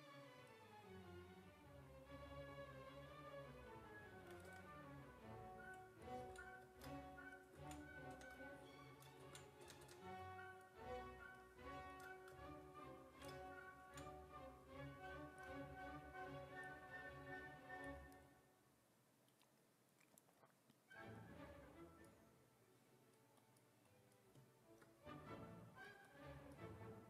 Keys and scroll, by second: 4.5 w, 8.2 w, 9.3 ctrl+z, 9.7 w, 9.9 w, 13.9 ctrl+z.